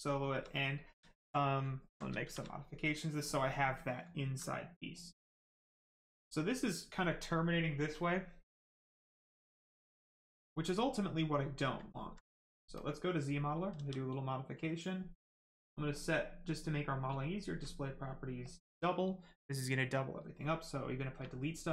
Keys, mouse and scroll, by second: 1.1 alt+right click, 2.1 shift+right click, 2.2 shift+d, 2.7 right click, 4.1 alt+right click, 4.4 right click, 4.5 right click, 9.4 right click, 11.8 alt+right click, 12.7 click, 13.7 s, 13.8 click, 15.3 click, 15.3 click, 17.2 shift+click, 18.4 click, 21.2 space.